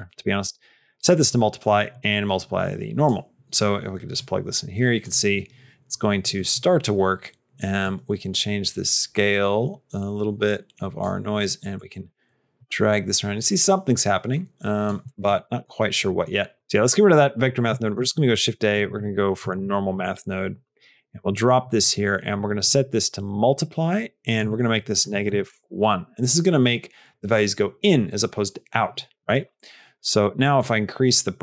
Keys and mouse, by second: 1.9-2.9 drag, 4.2 click, 6.3 middle click, 7.8 click, 10.5 click, 11.7-14.7 drag, 14.9 middle click, 15.5 middle click, 16.4 click, 21.5 middle click, 22.2-23.2 drag, 24.1-25.9 drag, 30.0 click, 30.4 click.